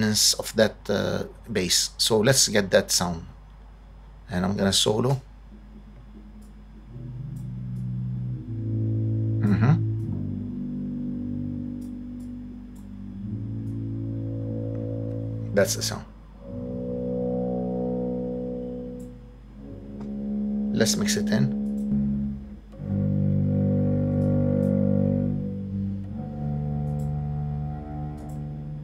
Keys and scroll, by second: 5.1 space.